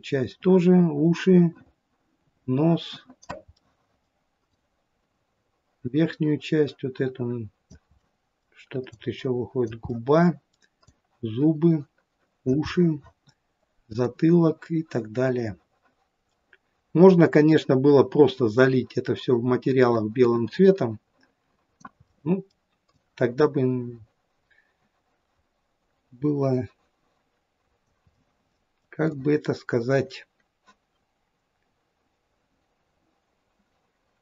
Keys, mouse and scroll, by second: 3.6 middle click, 4.6 click, 8.0 middle click, 8.3 middle click, 9.0 click, 9.9 middle click, 10.9 click, 12.7 middle click, 14.1 click, 22.0 middle click, 22.4 middle click, 22.9 click, 28.1 middle click, 29.2 click.